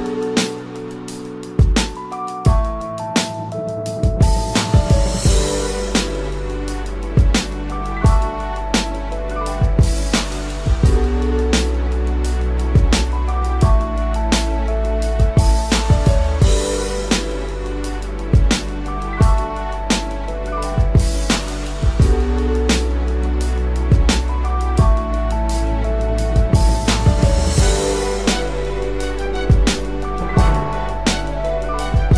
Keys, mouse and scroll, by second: 2.0 double click, 16.2 ctrl+-, 19.4 double click, 22.8 ctrl+=, 26.4 double click.